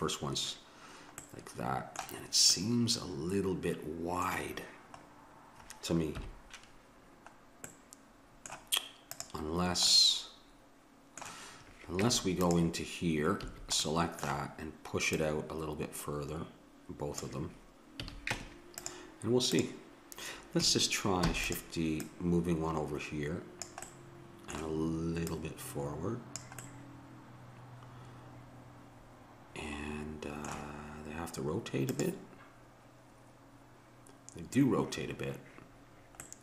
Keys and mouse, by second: 1.2-3.9 middle drag, 6.2 KP_1, 9.2-10.9 drag, 10.9-12.0 middle drag, 12.0 Tab, 13.5 a, 13.9 click, 14.1 middle click, 15.1-17.0 drag, 18.0 a, 18.3 Tab, 19.5-21.3 drag, 21.3 shift+d, 22.0-23.8 drag, 23.9 middle click, 25.3-27.1 drag, 36.2-36.4 middle drag.